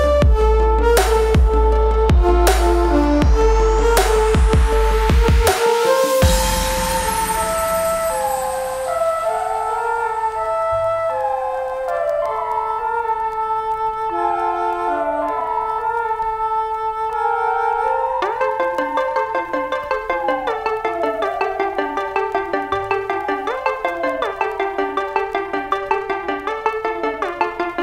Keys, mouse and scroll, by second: 0.5 Return, 2.4 click, 3.2 ctrl+space, 3.2 ctrl+click, 3.5 ctrl+space, 4.5 space, 5.5 click, 7.8-12.5 alt+shift+drag, 15.7 click, 17.9 8, 19.5 click, 21.2 typing, 22.5 click, 24.2 click.